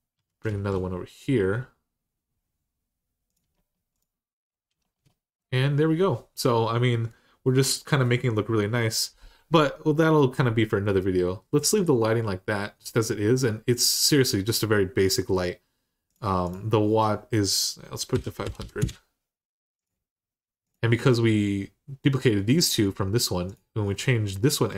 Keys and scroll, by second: 0.0-0.8 typing, 17.9-18.4 typing, 18.6 Return.